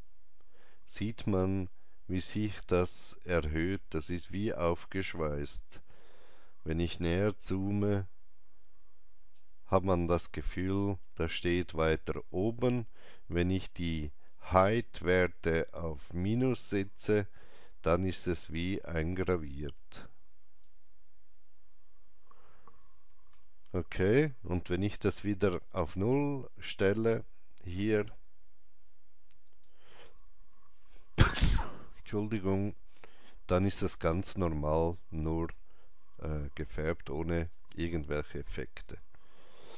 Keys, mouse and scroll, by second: 7.1-11.7 drag, 7.1-8.2 scroll down 1, 8.2 alt+right click, 15.1-23.0 drag, 15.1 alt+right click, 23.1-26.3 drag, 23.1 alt+right click, 23.3 ctrl+z, 27.8 ctrl+z, 27.8-32.0 drag, 32.9 ctrl+z, 32.9-36.7 drag, 37.3 ctrl+z, 37.3-39.7 drag, 38.7 ctrl+z.